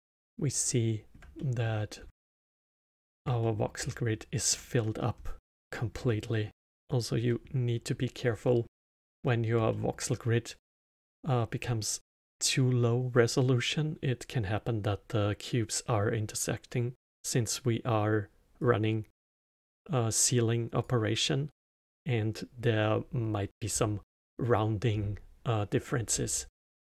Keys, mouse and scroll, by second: 1.9 scroll up 2, 2.6-5.1 alt+middle drag, 5.1-5.5 scroll down 2, 5.6-7.1 middle drag, 7.1 click, 7.9 click, 8.5 drag, 9.2 drag, 9.8 click, 10.3 click, 10.9 click, 11.3 click, 11.7 click, 12.3 click, 12.8 drag, 13.4 click, 14.7 click, 15.4 click, 15.8 click, 17.1 click, 18.2 click, 18.8 middle click, 19.6 click, 20.5 click, 21.0 click, 21.2 click, 21.6 click, 22.9 click, 24.4 middle click, 24.9 scroll down 5, 25.1-26.8 middle drag.